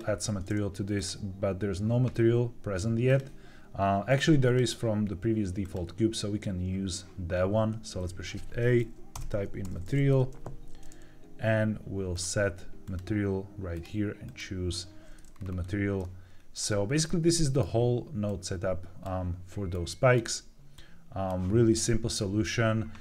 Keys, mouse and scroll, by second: 0.9 click, 3.0-4.1 drag, 4.4-5.6 drag, 7.8 shift+a, 13.6 click, 15.2-15.9 scroll down 4, 15.9 middle click, 16.5 scroll down 2, 17.0 middle click, 18.2 click, 19.6 click, 20.6 click, 21.6 middle click.